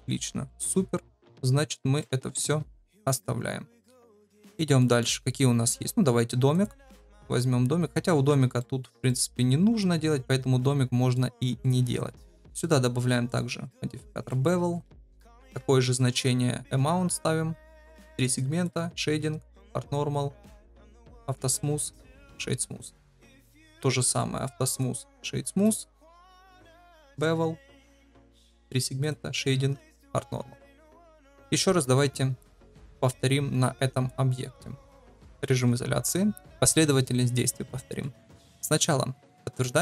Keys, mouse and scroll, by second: 0.4-1.4 middle drag, 2.0-2.5 shift+middle drag, 3.0 KP_Divide, 4.0 shift+middle drag, 4.5 middle click, 6.5 click, 7.3-8.3 middle drag, 8.5 shift+middle drag, 9.0-11.1 middle drag, 11.3 shift+middle drag, 12.4 shift+middle click, 15.4 ctrl+v, 17.6 click, 17.8 click, 18.7 click, 19.5 click, 21.1 click, 22.0-22.4 drag, 22.9 click, 24.7 click, 26.8-27.5 drag, 27.7 ctrl+v, 28.3 click, 28.5 click, 28.9 click, 29.9 click, 30.6 click, 31.2 ctrl+s, 31.5 middle click, 31.9 shift+middle drag, 32.3-32.6 middle drag, 33.9 click, 35.6 KP_Divide, 37.7 shift+middle drag, 39.5 ctrl+a.